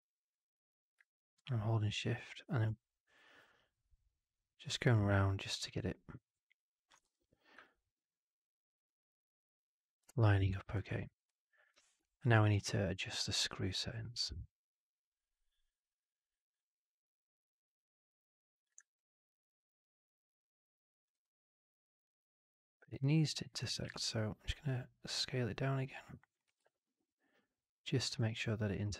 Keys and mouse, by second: 6.9 w, 7.6-10.7 alt+drag, 16.9-18.7 drag, 18.9-21.0 alt+drag, 21.2-23.5 alt+drag, 26.4 w, 26.6-28.0 alt+drag, 28.1 w.